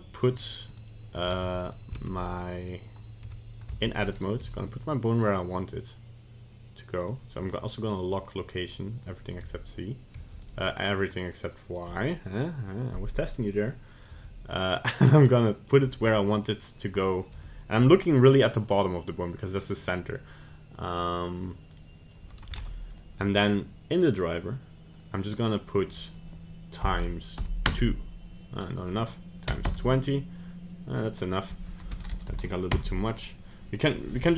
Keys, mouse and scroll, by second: 0.7 right click, 1.3 ctrl+Tab, 2.1 ctrl+Tab, 2.7 right click, 3.4 Tab, 4.1 right click, 4.4 g, 8.7 click, 9.4 g, 11.5 click, 11.8 click, 14.2 g, 17.3 g, 21.7 right click, 22.6 ctrl+Tab, 22.9 right click, 24.0 right click, 32.1 BackSpace, 34.1 right click.